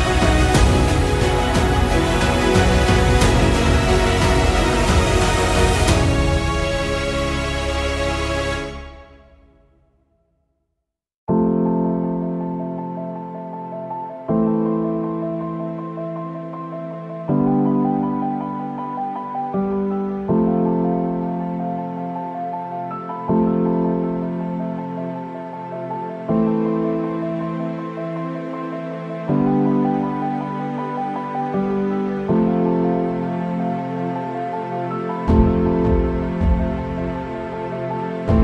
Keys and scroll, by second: 0.5 ctrl+z, 2.4 ctrl+z, 8.7 ctrl+z, 9.6 ctrl+z, 10.9 ctrl+z, 11.1 ctrl+z, 11.8 ctrl+z, 14.0 KP_0, 16.6 ctrl+z, 25.2 ctrl+z, 27.6 ctrl+z, 28.1 ctrl+z, 32.2 ].